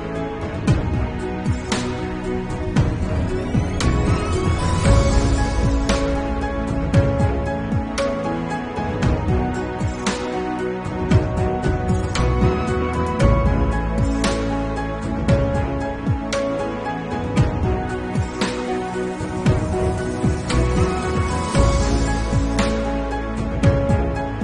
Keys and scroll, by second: 4.0 2, 5.7 3, 6.9 ctrl+s, 8.2 8, 8.4 ], 9.3 ctrl+alt+z, 9.7 ctrl+alt+z, 9.8 [, 11.9 ctrl+s, 14.2 3, 14.4 ], 14.9 ctrl+alt+z, 15.5 ctrl+alt+z, 15.6 1, 16.6 ctrl+s, 17.0 ], 17.8 ctrl+s, 22.9-24.1 typing, 23.5 Return.